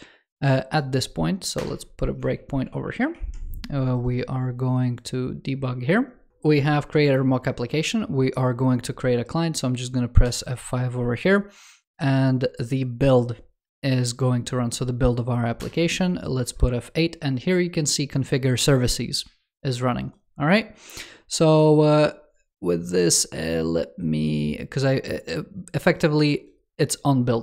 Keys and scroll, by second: 2.7 super+t.